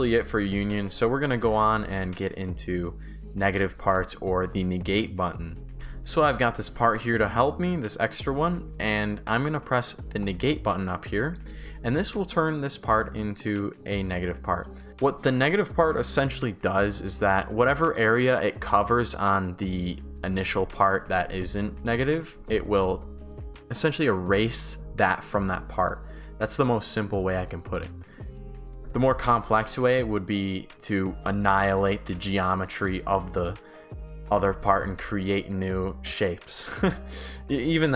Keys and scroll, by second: 0.8 shift+s, 3.9 Delete, 5.7 Pause, 6.7 shift+d, 8.4 shift+w, 11.3 shift+s, 14.9 Pause, 21.3 shift+a, 24.5 shift+d, 28.7 Pause.